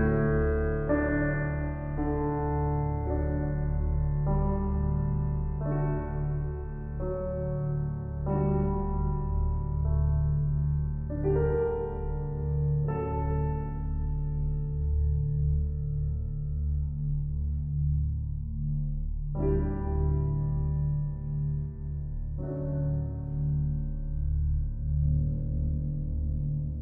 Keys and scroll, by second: 2.2 ].